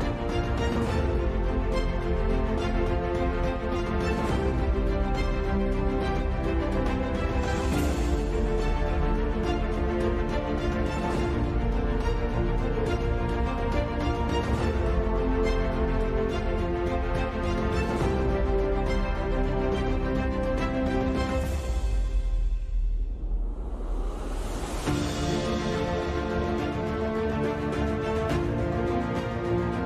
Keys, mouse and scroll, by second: 1.5 g, 1.8 click, 2.1 Tab, 3.0-6.4 typing, 3.4 click, 4.4 click, 5.2 click, 6.2 click, 7.7 Tab, 8.1 KP_5, 8.7 a, 8.9 ctrl+s, 9.3 n, 13.0 click, 13.1 Tab, 13.5 shift+a, 13.8 shift+s, 14.0 Tab, 14.1 shift+a, 17.6 shift+a, 18.2 s, 20.3 middle click, 20.5 Tab, 21.0 click, 21.2 right click, 21.7 middle click, 22.0 KP_7, 22.4 KP_5, 22.4 e, 23.7 s, 26.5 ctrl+r, 27.6 s, 29.4 s.